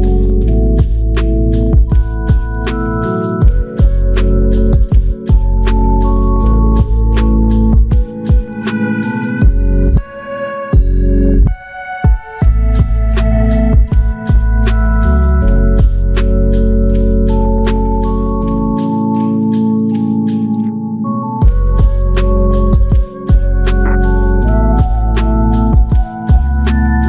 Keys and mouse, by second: 5.7 alt+click, 6.9 alt+click, 8.9-9.8 typing, 22.5 double click, 23.4 alt+click, 24.9 alt+click, 25.7 shift+click, 26.5 shift+click.